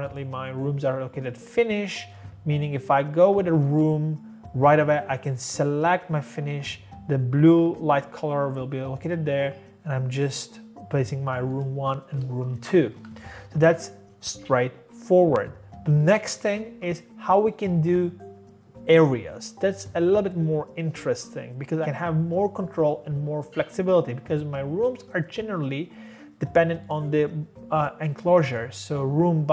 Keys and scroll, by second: 12.5 Escape, 12.6 Escape, 14.9 typing.